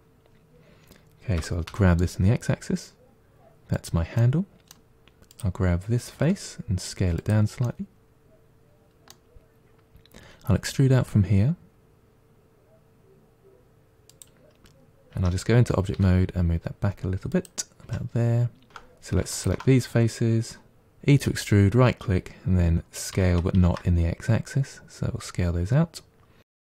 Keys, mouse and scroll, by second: 1.3 g, 4.1-5.2 middle drag, 5.2 click, 6.1 s, 7.5-10.1 middle drag, 10.1 e, 15.0 Tab, 15.8 g, 17.7 Tab, 18.7 g, 19.2 alt+click, 23.0 s.